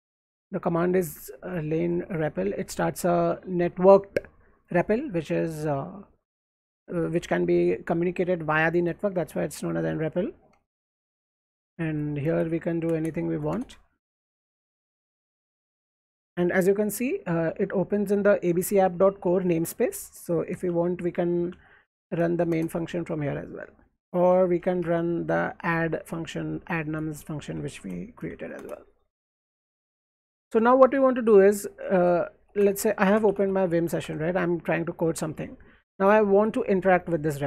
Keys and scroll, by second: 11.7-13.3 typing, 13.5 Return, 14.1 alt+Right, 15.2 alt+Left, 20.7-22.7 typing, 23.9-25.1 typing, 26.3 n, 26.7 Tab, 27.3-28.8 typing, 31.7 alt+Right, 32.3-34.3 typing, 35.8-36.5 typing, 37.3 alt+Right.